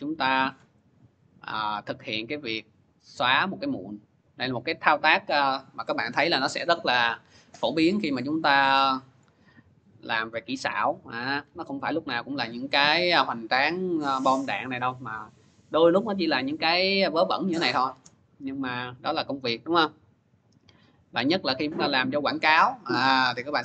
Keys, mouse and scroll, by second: 1.1 middle click, 1.1 scroll, 19.0 click.